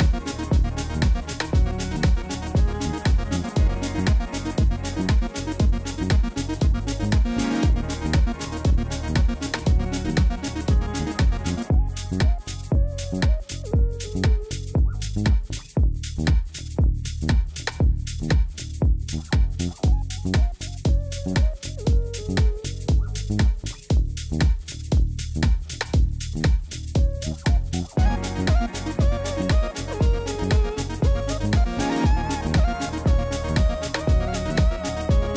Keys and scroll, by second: 5.2 u, 8.4 Tab, 10.8 u, 14.7 u, 16.2 u, 17.9 u, 19.5 u, 21.9 u, 27.3 u, 28.2 Tab.